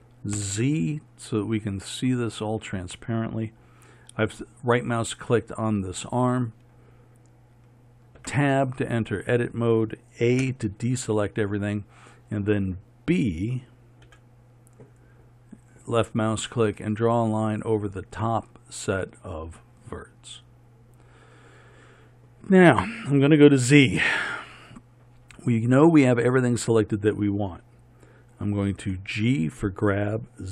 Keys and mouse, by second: 0.5 z, 8.3 Tab, 10.5 a, 14.1 b, 24.4 z, 28.9 g.